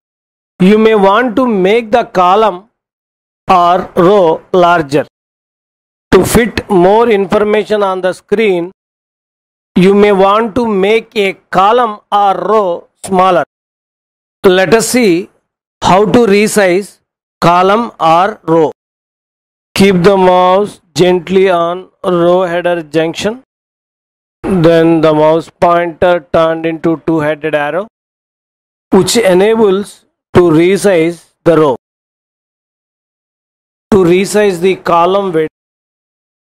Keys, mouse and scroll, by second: 31.2-32.5 drag.